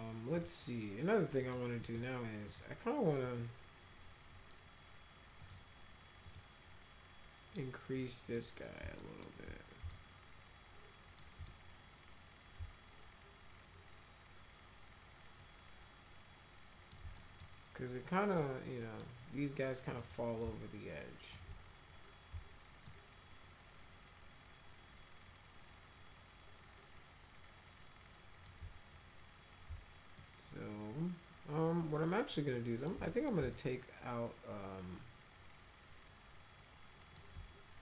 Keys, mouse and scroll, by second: 0.3 click, 1.4 click, 1.8 click, 2.4 click, 5.4 click, 6.2 click, 8.4 middle click, 9.0 alt+middle click, 9.9-11.2 alt+middle drag, 11.4-16.9 middle drag, 17.2 middle click, 18.4 middle click, 20.0 middle click, 20.4 alt+middle click, 22.9-28.5 alt+middle drag, 30.2-32.9 alt+middle drag, 33.1 middle click, 33.5-37.2 alt+middle drag.